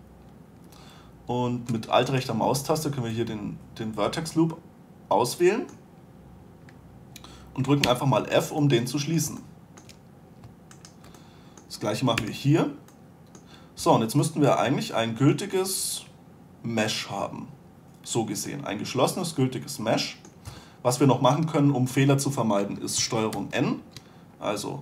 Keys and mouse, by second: 2.4 click, 2.7-4.2 middle drag, 7.0-8.2 middle drag, 8.2 f, 11.1 middle click, 11.4-12.5 drag, 12.5 f, 12.7-14.1 drag, 14.1 a, 19.8-20.8 middle drag, 20.8 a, 23.7 ctrl+n.